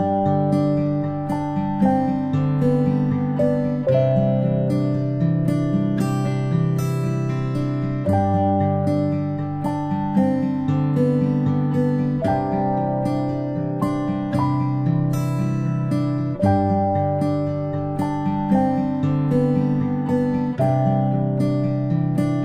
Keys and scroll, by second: 15.5 ctrl+i.